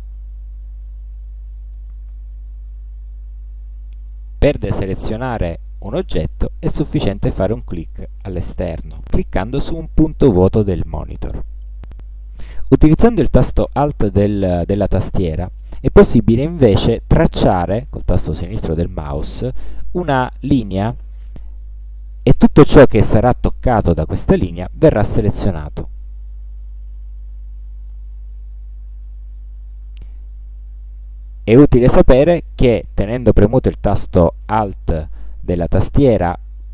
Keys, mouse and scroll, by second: 1.8 click, 3.6 click, 5.9 click, 7.8 click, 17.2-20.2 alt+drag.